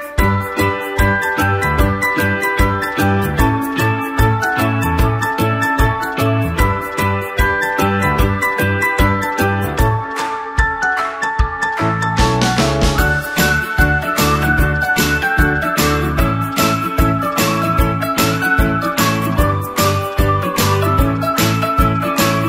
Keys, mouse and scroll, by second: 1.9 4, 2.6 click, 7.0 click, 11.0 alt+BackSpace, 12.6 click, 15.0 click, 15.8 ctrl+space, 16.5 click, 16.6 space, 17.1 ctrl+click, 17.5 space, 18.9 click, 19.2 space, 20.9 click.